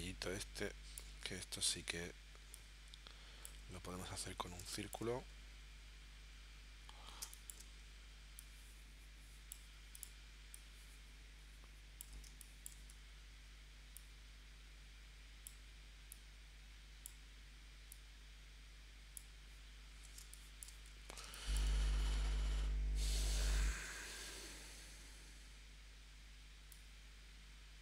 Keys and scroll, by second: 1.7 v, 4.6 space, 7.2 space, 12.3 space, 20.2 space, 21.2 space, 23.2 l.